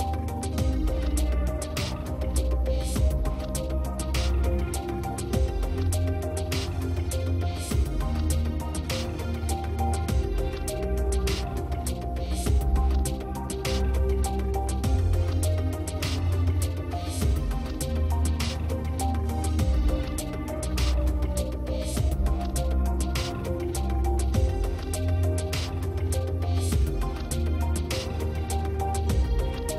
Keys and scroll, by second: 0.7 space, 2.4 space, 11.4 space, 18.5 space, 22.4 space.